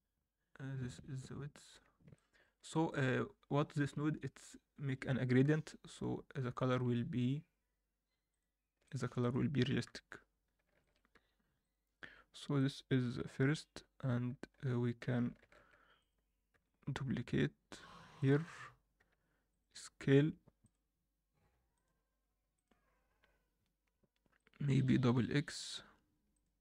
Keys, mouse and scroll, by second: 2.1 middle drag, 2.7-5.7 middle drag, 5.7 KP_1, 6.2 scroll down 1, 6.5 middle drag, 8.3 click, 8.8 middle click, 9.2 click, 9.8 KP_7, 10.4 scroll down 2, 10.8 shift+middle click, 11.1 s, 12.0 r, 13.0 g, 15.4 shift+d, 16.5 r, 19.0 s, 20.6-22.6 drag.